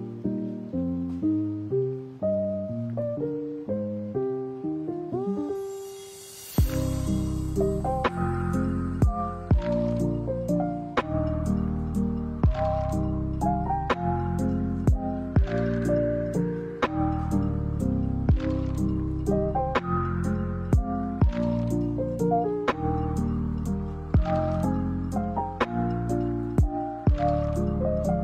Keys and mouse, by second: 4.5 alt+s, 8.0-10.4 drag, 11.1 alt+s, 13.4-15.1 drag, 15.6 alt+s, 22.0 ctrl+a, 25.4 shift+middle click, 26.2 middle click, 26.8 middle click, 27.5 middle click, 28.0 ctrl+a.